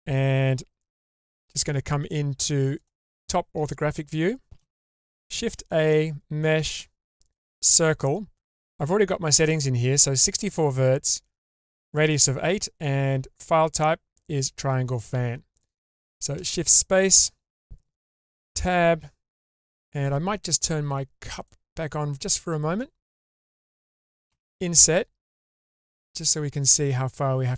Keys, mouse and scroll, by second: 1.0 `, 4.0-4.6 shift+middle drag, 5.4 shift+a, 15.5 click, 16.4 shift+space, 18.0 Tab, 21.4 click, 22.2 middle click, 23.1-24.3 scroll up 1, 24.3 i.